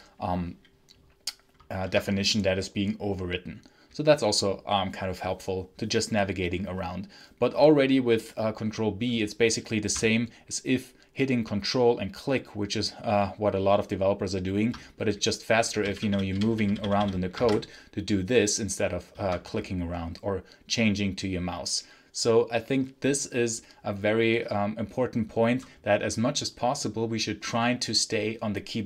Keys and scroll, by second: 1.8 Escape, 15.4-17.2 typing, 17.3 ctrl+b, 19.0 Escape.